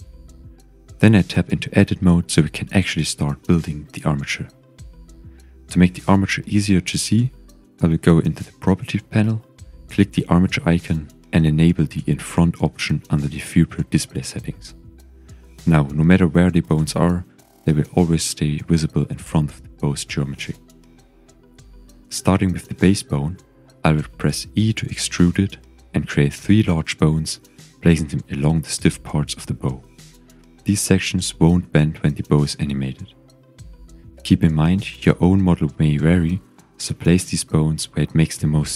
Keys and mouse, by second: 1.9 click, 2.8 Tab, 3.5 KP_1, 4.7 click, 5.5 click, 8.5 click, 9.1 click, 11.5 click, 12.7 shift+click, 13.6 shift+click, 19.1 g, 20.0 click, 20.6 click, 21.5 g, 25.7 click, 25.9 e, 26.9 click, 27.1 e, 28.7 click, 29.5-31.1 shift+drag, 31.3 shift+click, 36.3-37.9 middle drag.